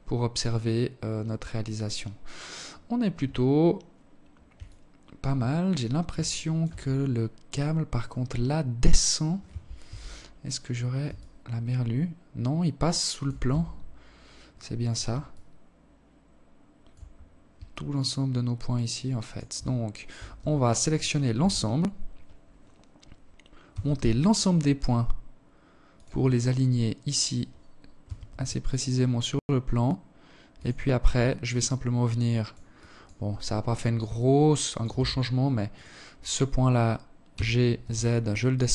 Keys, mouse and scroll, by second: 1.5-3.2 scroll up 3, 3.2 alt+click, 3.2 scroll up 1, 4.1 scroll up 2, 4.5 scroll down 1, 4.8 alt+shift+click, 5.4-5.7 scroll up 2, 6.0 right click, 6.5 right click, 7.5 right click, 8.4 KP_1, 9.7 alt+shift+click, 12.0 Tab, 13.8 alt+click, 15.6 scroll down 4, 16.2 alt+click, 18.6 a, 18.9 a, 19.9 KP_1, 22.2 g, 24.8-25.2 scroll up 5, 26.5-26.8 scroll up 1, 26.5 g, 29.4 Tab, 30.0 alt+click, 31.2 alt+click, 31.8-32.6 scroll down 4, 32.6 alt+click, 33.4 Tab, 34.2 right click, 35.7 g, 37.6 alt+click, 38.6 alt+shift+click.